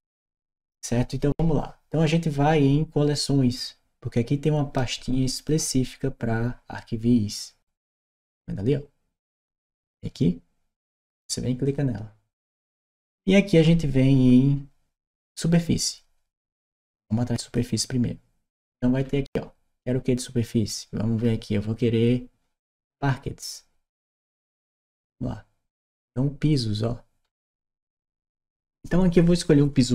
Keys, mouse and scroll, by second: 5.3 click, 11.4 click, 13.4-17.2 scroll down 2, 17.2 click, 18.4-19.1 scroll down 2, 20.9-21.3 scroll down 2, 24.5 click, 25.7 scroll down 2, 27.0-27.3 scroll down 2.